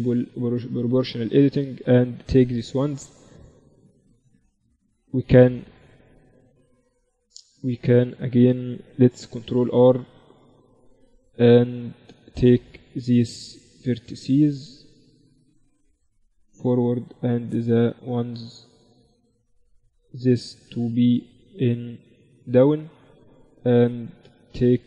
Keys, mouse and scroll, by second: 0.4 z, 1.2-3.2 middle drag, 1.5-3.2 drag, 1.5-3.7 right drag, 8.5 ctrl+r, 11.6-14.3 drag, 12.6 a, 12.8-16.1 right drag, 15.0-16.8 drag, 16.4 right click, 16.8 z, 18.4 a, 19.2-23.3 right drag, 22.3-24.8 drag, 23.8 z, 24.3-24.8 right drag.